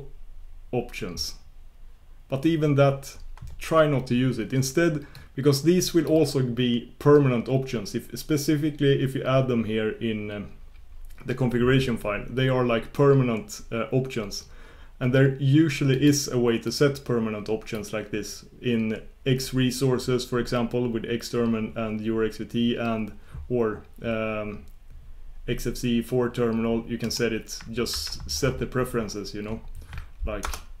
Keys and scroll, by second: 27.1 shift+super+q, 30.6 ctrl+super+Return.